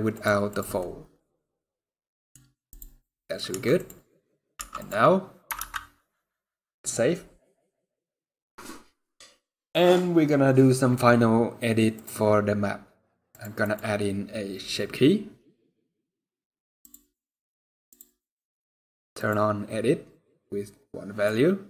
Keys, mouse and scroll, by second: 0.5 click, 0.6 middle click, 2.1 scroll down 2, 2.4 click, 2.7 scroll down 2, 2.8 middle click, 3.2 Tab, 4.3 Tab, 7.1 ctrl+s, 11.7 click, 16.5 click.